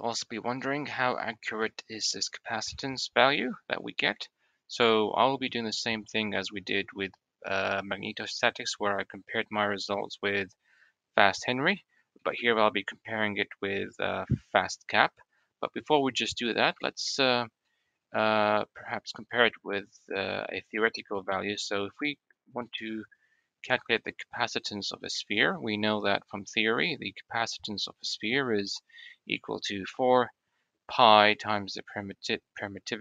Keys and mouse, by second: 1.2-1.9 middle drag, 2.4-3.1 middle drag, 4.5-5.6 middle drag, 6.3 middle click, 8.6-10.0 middle drag, 11.8 middle click, 14.2-14.7 drag, 16.4-17.0 shift+middle drag, 17.2 click, 17.9 click, 19.1 shift+a, 24.9-25.6 middle drag, 26.9-27.3 middle drag.